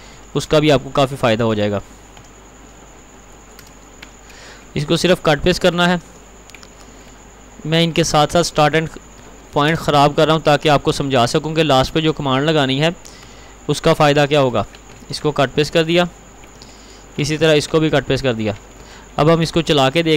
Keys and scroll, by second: 0.2 ctrl+t, 5.0 ctrl+r, 6.0 ctrl+t, 13.4 ctrl+v, 15.1 ctrl+r, 16.1 ctrl+t, 17.3 ctrl+r.